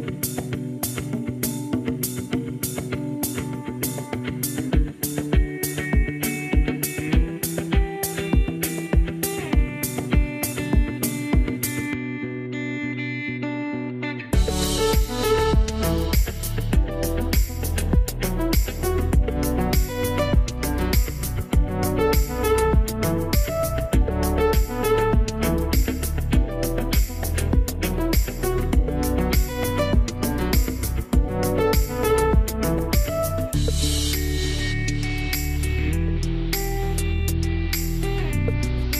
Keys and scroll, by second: 0.0 Return, 1.3 1, 1.5 Return.